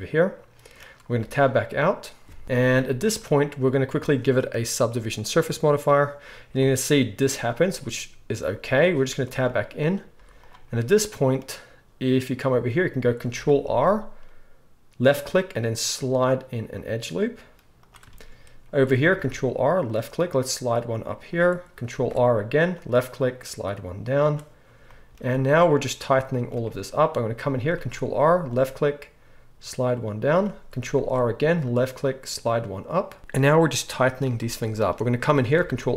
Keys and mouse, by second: 1.1 Tab, 2.4 KP_1, 4.8-17.9 drag, 7.2 z, 8.7 Tab, 10.2 z, 13.6 ctrl+r, 17.9-35.9 shift+middle drag, 19.1 ctrl+r, 21.9 ctrl+r, 27.7 ctrl+r, 30.9 ctrl+r, 35.6 ctrl+r.